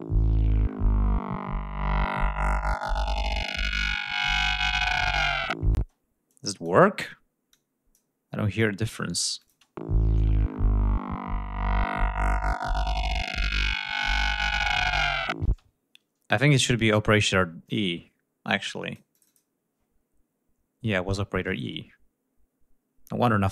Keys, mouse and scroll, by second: 5.4 space, 5.9 click, 7.1 click, 8.2 click, 9.0 click, 9.1 space, 10.1 ctrl+scroll down 2, 15.0 space, 18.2 click.